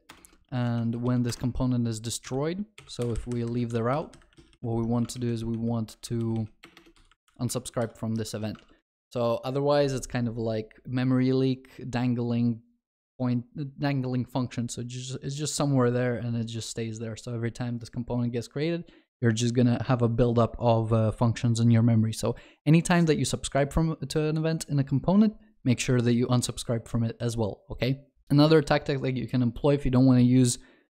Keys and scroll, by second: 3.7 Return, 4.4 alt+shift+Down, 7.6 ctrl+s, 8.3 ctrl+alt+shift+l.